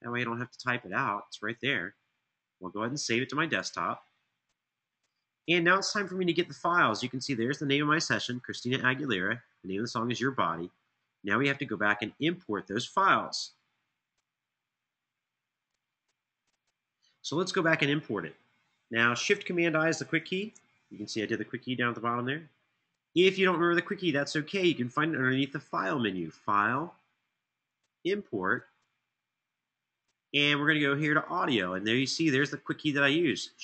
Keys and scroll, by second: 20.1 shift+super+i.